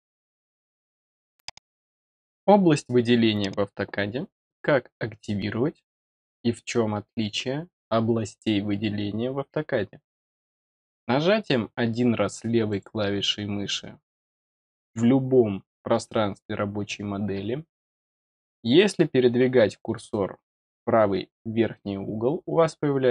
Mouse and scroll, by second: 12.6 click, 14.2-14.7 middle drag.